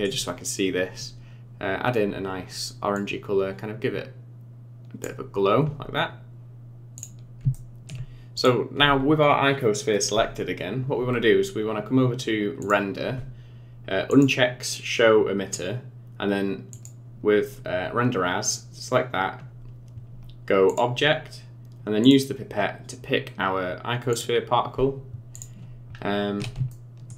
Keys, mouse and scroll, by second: 2.9 click, 5.4-6.0 scroll down 10, 7.0 click, 7.5 shift+middle click, 8.4 click, 12.6 click, 14.1 click, 16.7 click, 18.4 click, 22.0 click, 25.3 click, 26.0-26.6 scroll up 4, 26.7 shift+middle click.